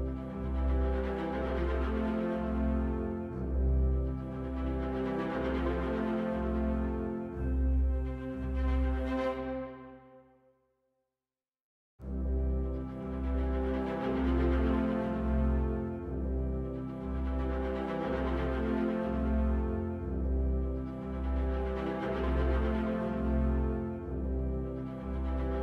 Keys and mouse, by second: 0.1 shift+click, 1.3 shift+d, 3.0 x, 3.4 right click, 4.9 shift+click, 6.3 ctrl+p, 8.3 click, 9.0 click, 10.1 ctrl+p, 12.2 shift+a, 17.5 KP_9, 17.7 KP_0, 17.9 KP_Enter, 19.2 click, 23.5 click, 24.6-25.0 drag, 25.0 right click.